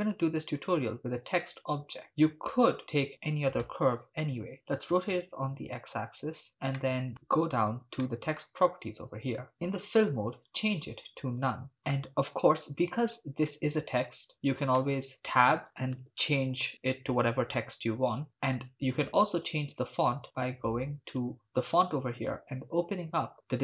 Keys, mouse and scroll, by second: 0.4 shift+a, 3.7 r, 4.5 x, 4.5 9, 5.0 0, 5.0 Return, 6.8 middle drag, 8.1-8.4 shift+middle drag, 9.3 click, 10.5-11.6 drag, 13.6 Tab, 14.2 Tab, 14.8 Tab, 15.6-16.5 typing, 17.9 Tab, 18.2 middle click, 18.3 click, 18.4 middle click, 21.1 click, 23.3 click.